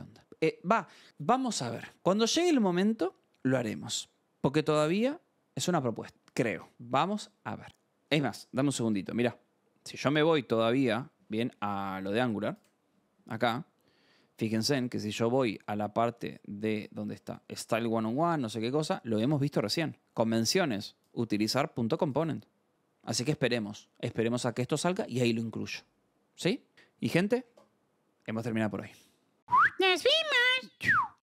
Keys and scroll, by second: 14.1 scroll, 15.5-17.3 scroll, 18.1 scroll.